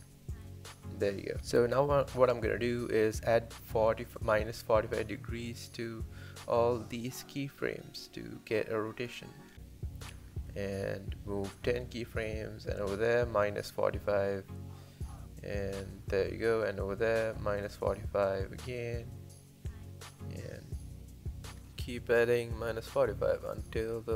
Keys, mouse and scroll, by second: 0.9 space, 2.1 click, 2.2 space, 3.7 space, 6.6-16.2 drag, 17.6-20.3 drag, 21.3-23.1 drag.